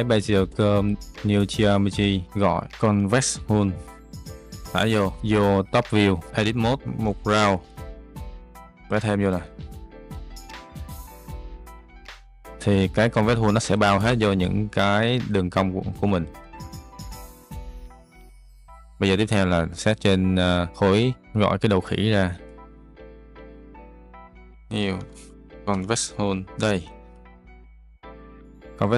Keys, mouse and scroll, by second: 0.7 click, 2.2 shift+a, 4.4 click, 6.3 click, 17.0 Tab, 21.2 shift+a, 24.8 shift+a.